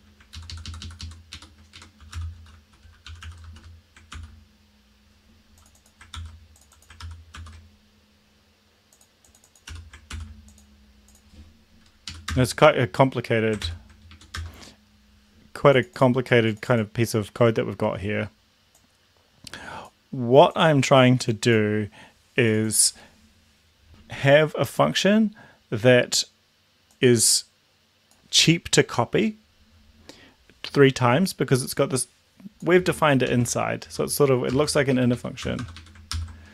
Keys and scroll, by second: 0.3 ctrl+Left, 1.3 ctrl+Right, 1.7-3.9 typing, 4.1 ctrl+s, 6.1 ctrl+c, 7.0 ctrl+v, 7.3 ctrl+s, 9.7 r, 10.0 ctrl+s, 12.1 Up, 12.4 Return, 13.7 ctrl+l, 13.9 Up, 14.3 Return, 33.4 ctrl+x, 33.9 Left, 33.9 Down, 34.2 Down, 34.5 BackSpace, 35.0 Up, 35.2 Up, 35.5 Return, 35.7 Return, 35.8 Up, 36.2 ctrl+v.